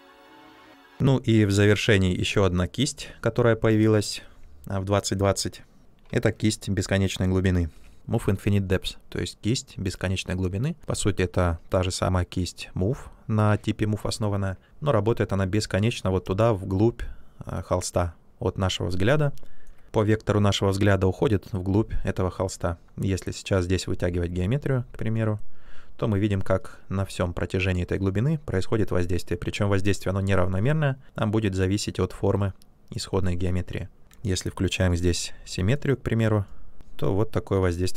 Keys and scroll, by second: 7.6 b, 34.1 x.